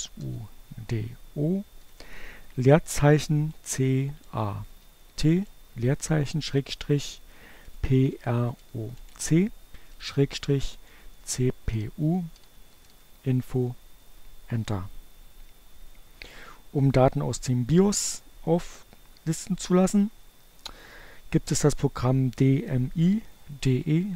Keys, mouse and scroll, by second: 0.0 o, 0.3 space, 2.2-3.8 typing, 5.1 shift+7, 5.4 p, 6.5-12.2 typing, 12.2 Return.